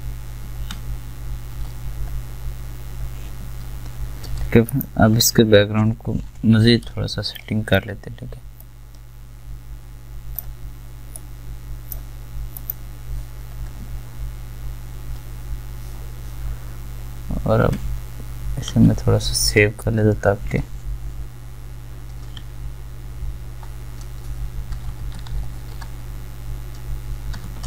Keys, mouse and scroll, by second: 4.3 v, 18.0 click.